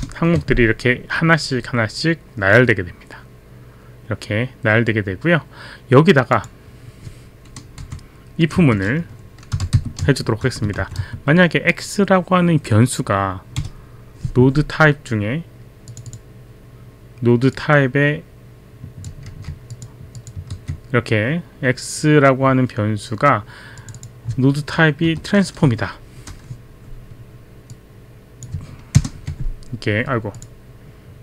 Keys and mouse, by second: 6.3 click, 7.8 Left, 8.6 Return, 8.6 Left, 9.3-11.7 typing, 15.9 click, 17.6 click, 19.7 click, 20.2 click, 20.5 ctrl+v, 23.8 click, 25.1 BackSpace, 27.7 click, 29.3 ctrl+Return, 30.4 click.